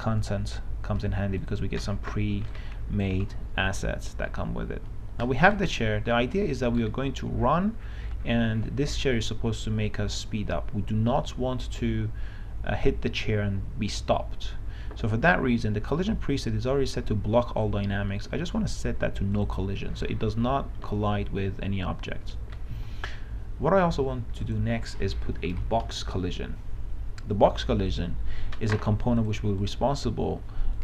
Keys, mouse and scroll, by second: 1.7 click, 3.1 right click, 3.3 s, 4.0 d, 5.6 click, 6.0 w, 6.9 s, 25.9 click, 28.2 click.